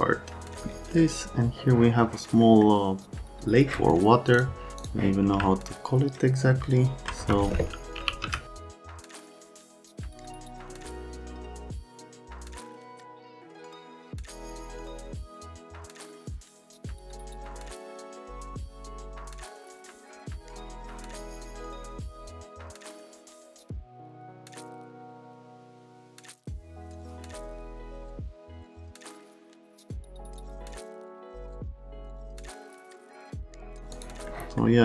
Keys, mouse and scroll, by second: 2.4 middle click, 4.4 click, 4.8 click, 5.4-6.5 alt+middle drag, 7.2 F3, 7.7-8.7 typing, 8.3 right click, 8.7 F3, 8.8 F3, 9.1 click, 9.5 click, 10.8 click, 10.9 click, 11.4 click, 11.8 click, 12.1 click, 12.4 middle click, 12.7 middle click, 12.8 middle click, 13.1 right click, 13.4 middle click, 13.9 click, 14.1 right click, 14.5 F3, 15.0 click, 15.2 click, 15.5 ctrl+z, 15.5 click, 15.7 click, 16.1 right click, 16.5 click, 16.8 alt+middle click, 17.1 F3, 17.2 middle click, 17.7 middle click, 17.8 alt+middle click, 18.0 click, 18.5 w, 18.9 click, 19.2 click, 20.1 middle click, 20.2 alt+middle click, 20.4 middle click, 20.8 alt+middle click, 21.5 shift+click, 22.1 click, 22.3 right click, 22.9 click, 22.9-23.7 typing, 23.0 middle click, 23.7 click, 23.9 click, 24.0 click, 24.7-25.5 scroll down 4, 25.9 click, 26.5 click, 27.1 right click, 28.6 click, 28.9 click, 29.3 right click, 29.4 click, 29.6 middle click, 30.0 right click, 30.1 alt+right click, 30.3-31.1 typing, 30.5 right click, 30.9 middle click, 31.2 middle click, 31.4 middle click, 31.9 click, 32.0 middle click, 32.2 alt+middle click, 32.4 alt+right click, 32.6 middle click, 33.3 click, 33.4 right click, 33.9 click, 34.3-34.6 scroll down 1.